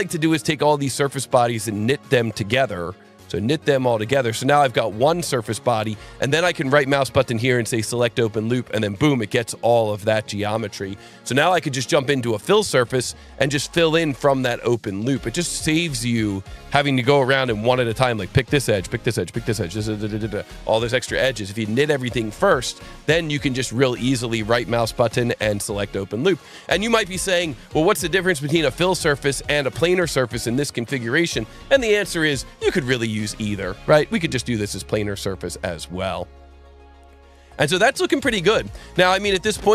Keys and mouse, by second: 2.1 click, 3.9 click, 5.5 click, 6.5 right click, 7.8 click, 12.5 click, 14.8 click, 15.5 click, 24.3 right click, 25.6 click, 33.1 click, 34.6 click.